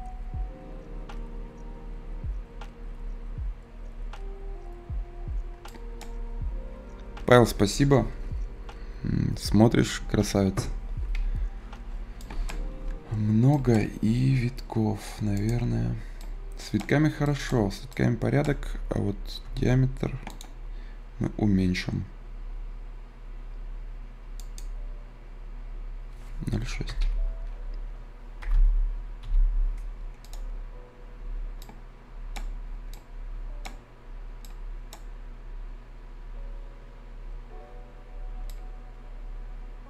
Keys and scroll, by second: 19.3 ctrl+z, 26.9 i, 28.3 BackSpace, 28.4 s, 29.1 f.